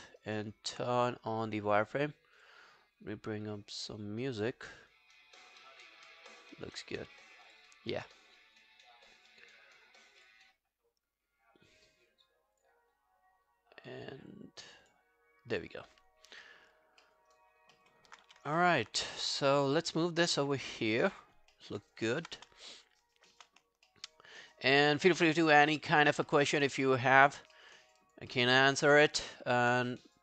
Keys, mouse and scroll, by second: 0.1 alt+right click, 4.7-6.2 scroll up 9, 6.2 scroll down 2, 16.5 alt+middle click, 16.8 alt+scroll up 3, 17.1 alt+middle click, 17.3 alt+right click, 17.5 alt+scroll down 5, 17.8 alt+middle click, 18.1 alt+scroll up 1, 18.3 w, 18.6 alt+middle click, 20.9 alt+middle click, 21.3-21.6 alt+scroll up 3, 21.6 alt+middle click, 21.8 alt+right click, 22.1 alt+middle click, 22.4 space, 23.4 space, 23.9 alt+middle click, 24.4 alt+scroll down 1, 24.6 alt+click, 24.9 alt+middle click, 25.2 alt+scroll up 2, 25.4 alt+click, 25.7 alt+middle click, 26.0 alt+right click, 26.3 alt+middle click, 26.6 alt+right click, 26.8 alt+middle click, 27.1 alt+right click, 27.3 alt+click, 27.6 alt+middle click, 27.8 alt+right click, 28.0 alt+click, 28.3 alt+middle click, 28.5 alt+right click, 29.0 q, 29.4 alt+middle click.